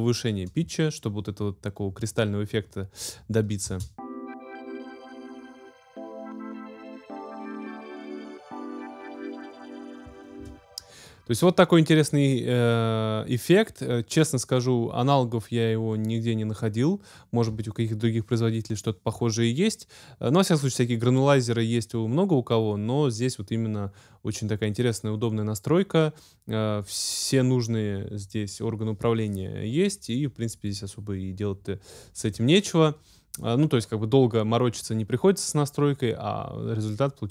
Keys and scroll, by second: 3.6 space, 10.4 space.